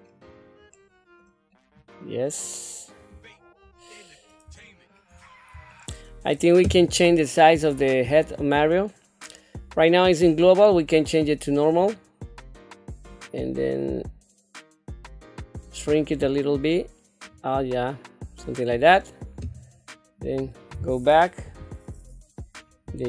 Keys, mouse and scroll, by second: 0.2 scroll down 2, 0.7 middle click, 1.5 middle click, 3.7 scroll up 2, 4.0 scroll down 2, 4.6 shift+middle click, 5.2 scroll up 2, 5.7 shift+middle click, 8.1 click, 10.4-12.0 drag, 13.1 click, 13.7-17.2 drag, 17.8-18.9 middle drag, 20.2 click, 21.4 KP_3, 22.8 g.